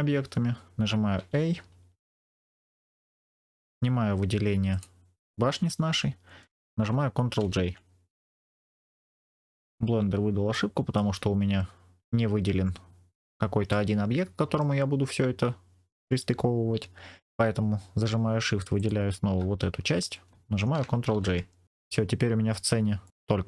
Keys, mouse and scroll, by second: 1.1 a, 4.6 shift+click, 7.3 ctrl+j, 10.4 shift+middle click, 13.6 middle click, 18.7 shift+click, 21.0 ctrl+j, 21.6-22.1 scroll down 3, 22.9 middle click.